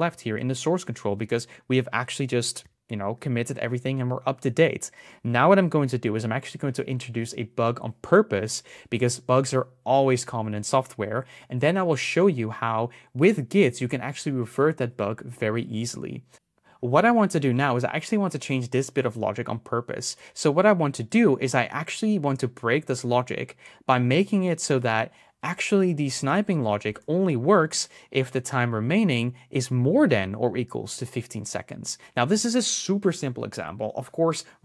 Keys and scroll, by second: 26.0 BackSpace, 26.6 shift+>.